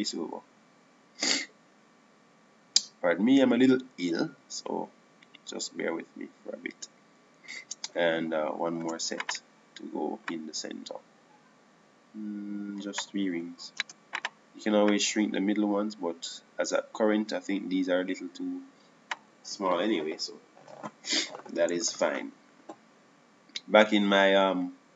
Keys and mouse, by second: 0.1 shift+d, 2.3-3.8 drag, 10.7 shift+d, 12.0-13.9 drag, 15.9 shift+d, 16.7-18.6 drag, 23.6 Tab.